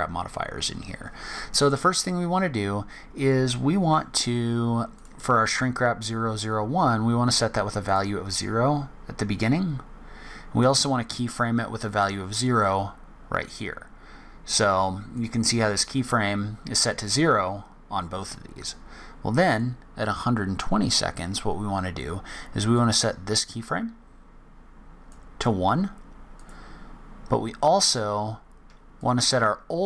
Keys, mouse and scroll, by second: 4.9 click, 7.8 click, 9.4 click, 12.0 click, 15.1 click, 19.5 click, 22.7 click, 26.3 click, 29.0 click.